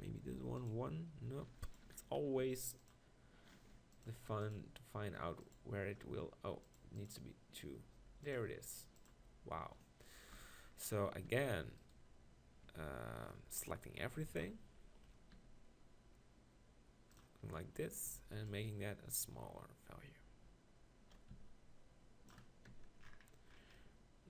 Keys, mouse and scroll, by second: 10.3 KP_1, 11.3 r, 12.7 Tab, 14.2 ctrl+l, 15.3 r, 22.7 Tab.